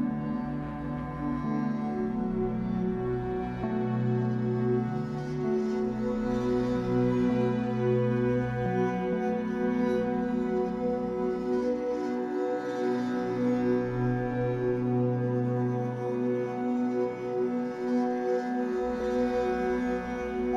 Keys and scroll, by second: 3.5 1, 6.5 ctrl+z, 7.2 Escape, 7.4 3, 9.3 ctrl+z, 12.4 Escape, 16.7 2, 18.4 Delete, 19.2 1.